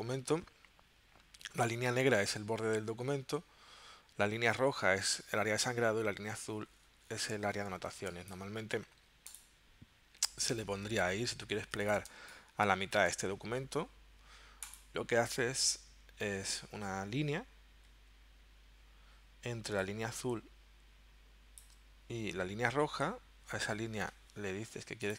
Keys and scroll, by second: 7.9 space, 11.6 z, 12.1 space.